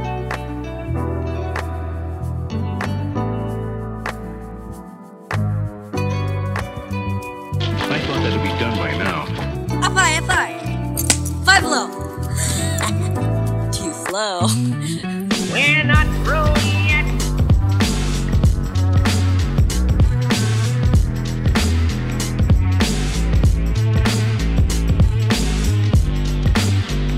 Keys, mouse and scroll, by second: 0.2-1.4 ctrl+drag, 3.6 click, 4.2 click, 5.0 Tab, 6.3 click, 7.4 alt+a, 9.2 click, 9.5 shift+click, 11.6 g, 12.0 z, 13.5 drag, 14.1 l, 14.9 ctrl+v, 16.9 click, 18.5 Tab, 19.5 click, 20.0 click, 20.6 click, 21.2-22.0 typing, 21.4 click, 21.8 click, 22.0 click, 24.0-27.1 ctrl+drag.